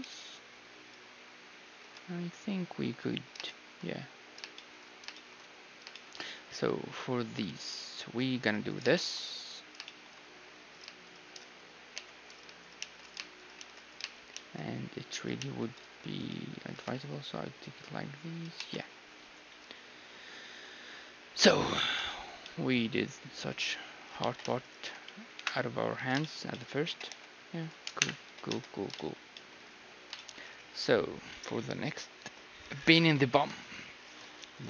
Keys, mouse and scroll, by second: 1.8 a, 2.0 middle click, 3.0-3.5 scroll down 1, 3.5-4.5 middle drag, 8.0 ctrl+r, 10.7-18.3 right drag, 11.3 middle click, 12.0 j, 12.8 shift+r, 13.6 shift+r, 14.3 shift+r, 15.4 shift+r, 16.7 g, 18.6 a, 18.8-21.0 middle drag, 22.1 z, 22.4-24.3 middle drag, 23.7 z, 24.2 z, 24.6-26.5 right drag, 25.3 KP_1, 25.9 middle click, 26.2 z, 26.9 g, 28.0 KP_1, 28.2 z, 28.5 Tab.